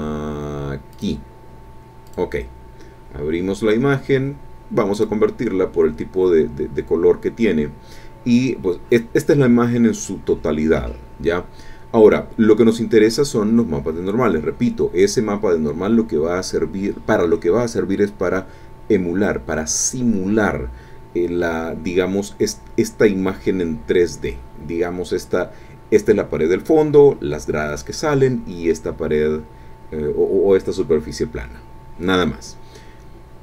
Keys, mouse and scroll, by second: 0.9 click, 2.0 click, 4.9 click.